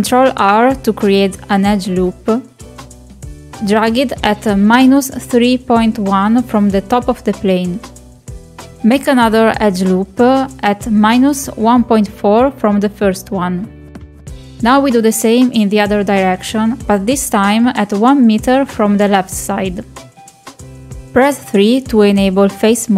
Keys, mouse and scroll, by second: 1.6 ctrl+r, 4.3-8.4 drag, 10.0 ctrl+r, 11.3-14.5 drag, 16.6 ctrl+r, 19.4 click, 19.6-20.9 drag.